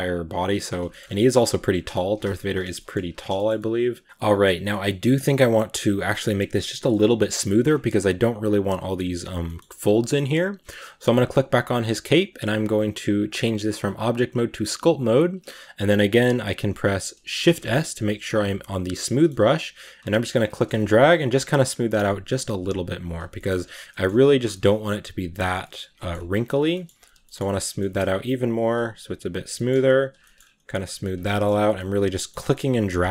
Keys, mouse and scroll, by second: 0.0 click, 0.7 shift+middle click, 0.8 shift+scroll up 2, 1.0-1.3 middle drag, 1.3 s, 1.9 g, 2.6 middle click, 3.0 scroll down 2, 3.2-5.2 shift+middle drag, 5.2-6.7 right drag, 6.7-7.4 middle drag, 7.4-9.3 scroll up 3, 9.3 middle click, 9.8-10.8 scroll down 2, 9.9 middle click, 10.9 g, 14.7-17.3 drag, 17.3 shift+s, 19.1 scroll up 2, 19.8 click, 20.4 shift+middle click, 20.6 click, 21.2 scroll down 1, 21.5-23.1 drag, 23.1 scroll down 1, 23.2 middle click, 23.6 click, 24.0 middle click, 24.2 click, 24.4 shift+middle click, 24.5 scroll up 1, 24.7 click, 25.5 middle click, 26.0 scroll up 1, 26.1 click, 26.5 scroll down 1, 26.6 shift+middle click, 26.8 click, 27.0 scroll down 1, 27.1 middle click, 27.5 click, 27.6 middle click, 28.0-29.4 drag, 29.4 scroll down 1, 29.4 middle click, 29.9 click, 30.1 shift+middle click, 30.3 scroll up 1, 30.5 click, 31.1 middle click, 31.5 click, 32.2 shift+middle click, 32.5 click.